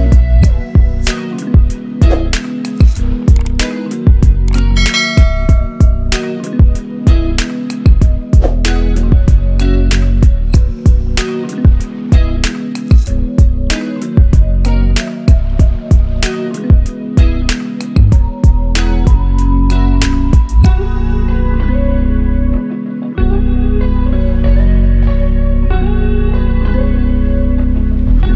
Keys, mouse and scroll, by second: 1.4 click, 2.0 scroll down 1, 3.2-4.8 drag, 5.6 ctrl+a, 6.3 click, 7.0 ctrl+d, 7.4-9.7 drag, 10.4-12.2 drag, 14.4-14.7 scroll down 1, 14.7-15.6 click, 15.8 ctrl+a, 16.6 click, 17.2 ctrl+d, 17.7 click, 18.1 Down, 18.5-19.0 click, 19.4 ctrl+t, 20.0-21.4 alt+drag, 22.1 Down, 23.7-27.0 drag.